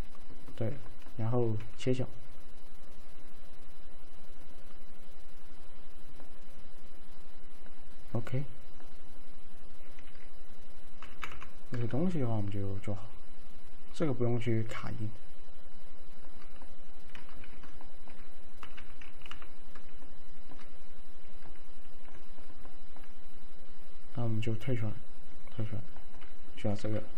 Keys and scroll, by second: 1.7 alt+f, 10.1 z, 11.1 F3, 11.2 F3, 11.5 F4, 17.5 ctrl+z, 18.7 F3, 18.8 F3, 19.4 F4, 26.9 alt+z.